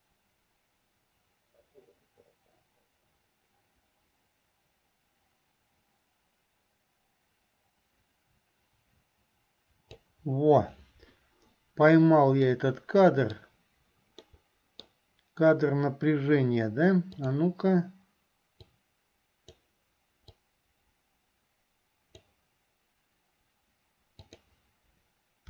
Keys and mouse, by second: 12.6 middle click, 14.4 middle click, 18.9-19.9 drag, 18.9-19.9 right drag, 20.6-22.6 drag, 20.6-22.6 right drag, 24.4 click.